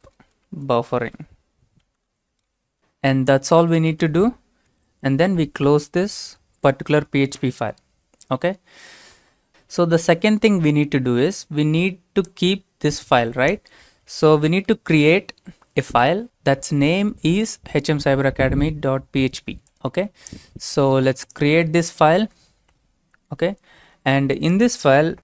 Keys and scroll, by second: 0.0-3.0 typing, 3.6 Return, 4.7 typing, 14.7 ctrl+c, 22.1 ctrl+v.